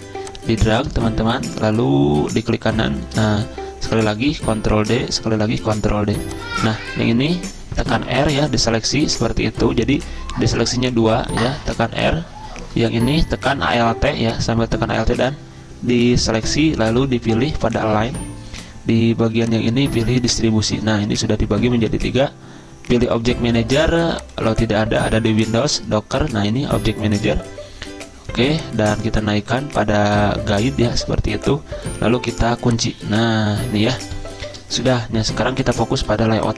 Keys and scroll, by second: 4.2 ctrl+d, 5.2 ctrl+d, 7.8 r, 10.6 ctrl+z, 11.0 ctrl+z, 11.6 r, 36.0 z.